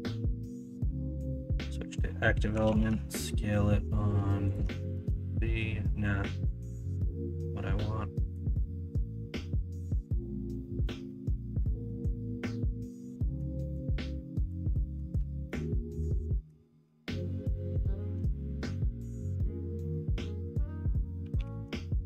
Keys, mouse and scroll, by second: 2.5 s, 4.9 ctrl+z.